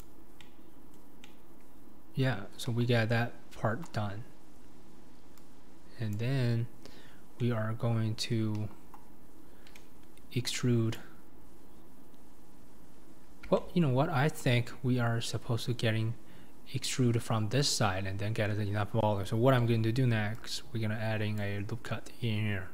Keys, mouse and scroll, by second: 0.0 click, 0.2 scroll down 2, 0.4 middle click, 1.2 scroll up 1, 1.2-2.7 middle drag, 2.7 KP_1, 4.1-5.4 scroll up 4, 6.1 click, 6.9-7.4 scroll down 2, 7.4-8.6 middle drag, 8.6 KP_1, 11.0 click, 13.0-13.6 scroll down 4, 13.6-14.8 shift+middle drag, 14.8-16.1 scroll up 2, 19.6 ctrl+r.